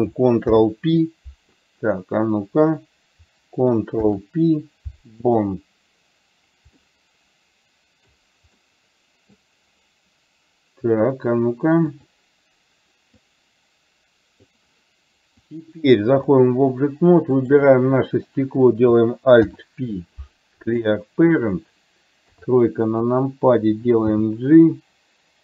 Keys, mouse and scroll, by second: 0.6 alt+p, 4.1 ctrl+p, 6.9-8.2 middle drag, 8.7 middle click, 12.1 click, 13.4-14.7 drag, 15.6-16.6 drag, 17.4 click, 19.4 alt+p, 22.3 KP_3, 24.2 g.